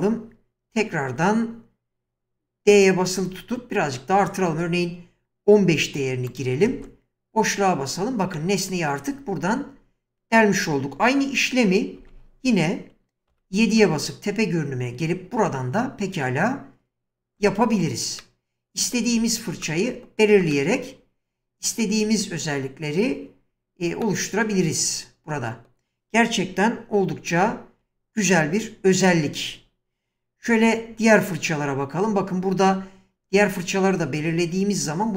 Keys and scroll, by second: 2.7 d, 6.7 space, 12.0 4, 17.4 space, 27.0 ctrl+z, 30.5 w, 34.0 typing.